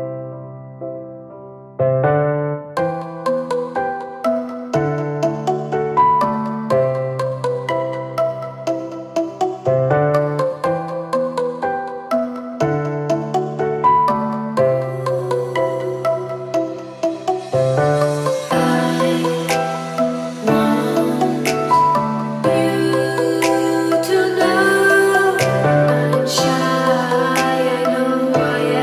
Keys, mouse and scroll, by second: 0.3-3.3 drag, 4.3 click, 5.3 click, 6.6 click, 8.9 click, 9.4 click, 10.5 click, 11.6-12.2 drag, 12.4 click, 14.4-14.7 ctrl+scroll up 3, 15.4 ctrl+click, 16.3 ctrl+scroll up 2, 16.9-17.2 ctrl+drag, 18.2 ctrl+scroll down 2, 18.8-19.2 ctrl+drag, 20.1 click, 20.7 click, 21.3 click, 22.2-23.3 drag, 23.4-24.7 drag, 25.1 click, 27.4 click, 28.1 click.